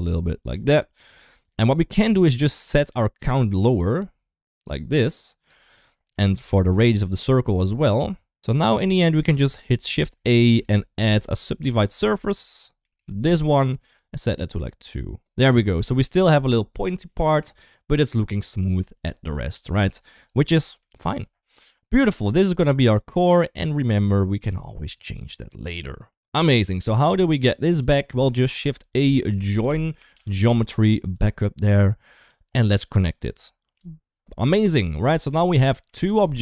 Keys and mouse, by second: 1.2 click, 1.4 click, 2.3-5.3 drag, 6.0 middle click, 6.8-8.2 shift+drag, 8.2 ctrl+z, 10.1 click, 10.3 shift+a, 12.8 Down, 15.8-16.2 middle drag, 17.1-17.5 middle drag, 19.3 middle drag, 20.6 middle click, 21.7 middle click, 22.7 click, 22.9 click, 23.8 middle click, 24.2 click, 25.4 click, 26.5 middle click, 27.2 click, 28.1 shift+a, 32.0 click, 33.0-33.6 drag, 34.2 shift+middle drag, 34.5-35.1 middle drag, 35.5 shift+middle click, 35.9 middle click.